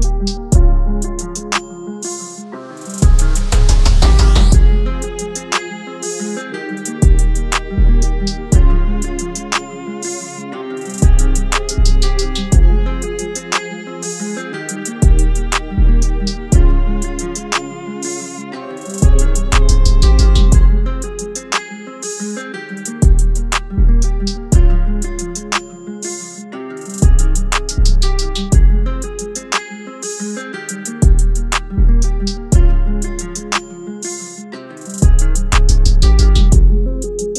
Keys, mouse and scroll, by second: 1.4-3.5 alt+shift+drag, 3.5-5.2 typing, 6.9 click, 7.8 alt+shift+click, 8.7-9.7 shift+drag, 10.2-11.8 drag, 13.0 shift+d, 13.6 a, 14.5 shift+y, 16.3 click, 18.3 click, 24.8 click, 25.7 i, 26.5 click, 30.9 i, 31.3 click, 31.6 v, 32.7 click, 36.3 Tab.